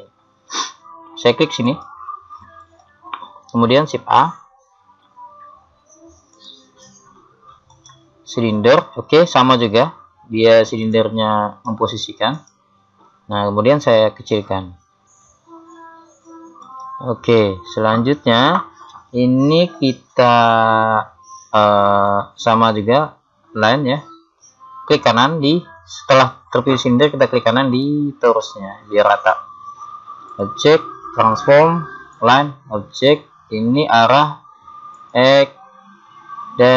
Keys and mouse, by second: 1.7-3.7 drag, 4.1 shift+a, 10.3-13.6 middle drag, 13.6 click, 14.0 s, 28.3 right click, 35.0 click.